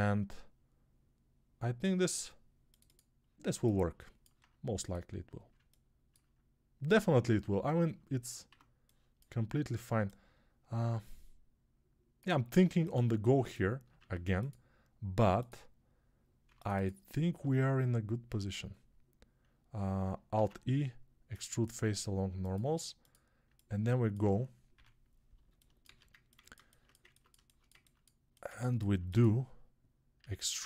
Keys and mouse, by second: 8.3 1, 11.4-13.4 drag, 13.4-30.6 ctrl+middle drag, 13.8 ctrl+r, 16.3 3, 20.2 alt+e, 24.6 Home, 25.7 alt+z, 30.0 e.